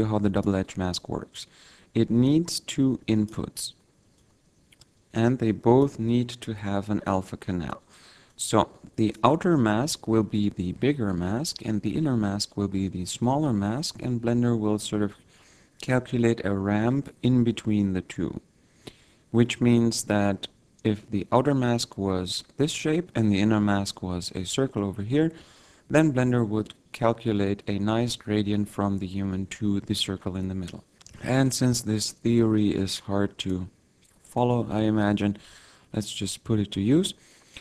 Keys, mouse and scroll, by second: 2.5 click, 4.5 click, 8.5 click, 32.8 click, 34.4 click, 35.1 shift+a.